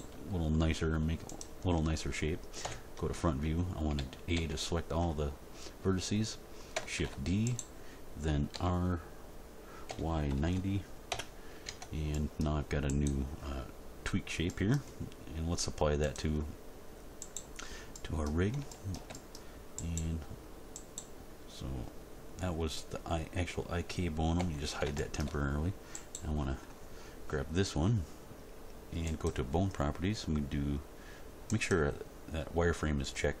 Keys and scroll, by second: 0.1 e, 2.6 End, 3.9 a, 6.9 shift+d, 8.5 r, 9.9 y, 10.3 9, 10.4 0, 11.1 Return, 11.6 Tab, 24.3 h.